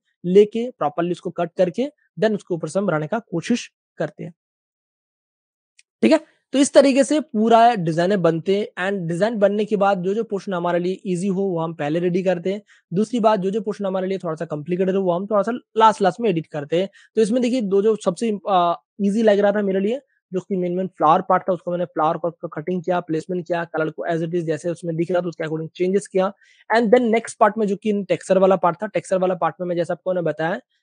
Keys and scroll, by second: 0.5 super+d, 4.4 space, 6.0 space, 6.1 space, 13.4 super+space, 14.7-16.5 typing, 15.7 super+space, 15.8 super+space, 18.0-18.9 typing, 20.0 v, 25.0 super+space, 25.1 super+space, 26.3 space, 26.4 space, 26.5 space.